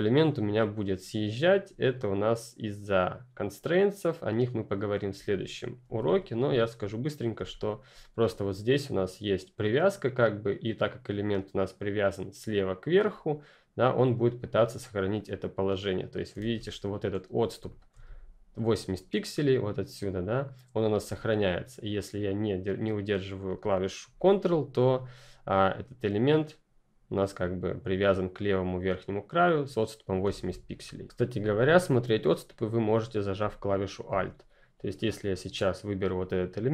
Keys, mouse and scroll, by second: 5.1 ctrl+click, 5.8 ctrl+z, 7.3 ctrl+z, 7.4 ctrl+click, 12.9 click, 15.1 click, 16.4 ctrl+z, 17.6 ctrl+click, 30.2 ctrl+z, 33.3 ctrl+F10, 33.6 ctrl+click.